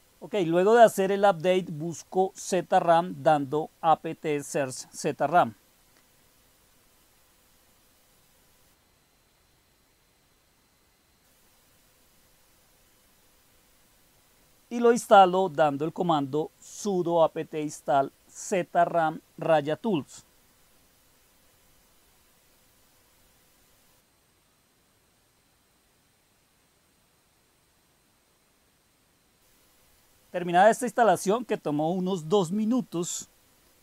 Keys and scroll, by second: 0.0-5.5 typing, 5.8 Return, 13.1-16.3 typing, 18.0-20.5 typing, 21.4 Return, 30.1-31.3 typing, 32.6-33.8 typing.